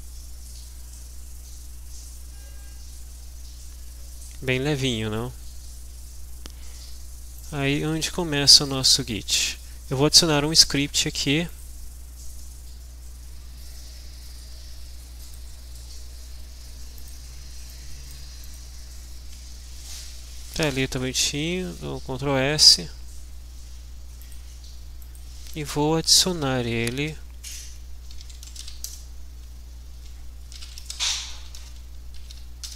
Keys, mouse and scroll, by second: 7.5 click, 8.5-9.6 drag, 11.4 click, 15.2 click, 17.0 click, 17.6-18.7 drag, 20.6 click, 21.2 ctrl+s, 24.2 click, 26.2-29.1 typing, 30.3-32.7 typing.